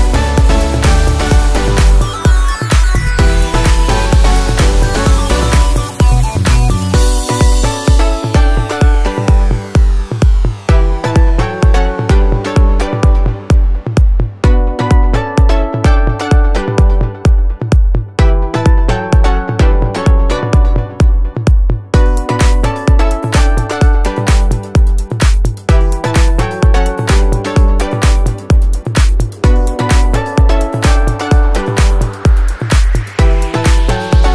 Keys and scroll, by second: 8.4 ctrl+0, 22.3 ctrl+t.